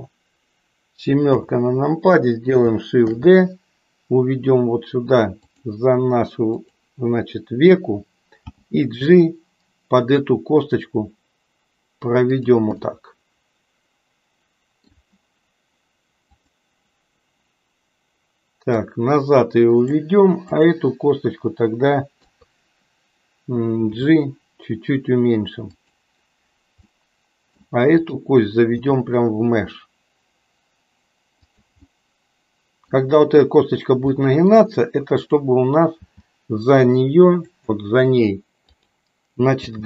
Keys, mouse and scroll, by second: 1.2 KP_7, 3.1 shift+d, 8.3 g, 12.9-15.0 middle drag, 16.2 click, 18.9-20.0 drag, 20.5 click, 22.2 KP_3, 23.8 g, 26.8 middle click, 28.0 click, 28.7 g, 31.8-33.0 middle drag, 34.1 middle click, 35.1 click, 36.1 g, 38.7 click, 39.6 g.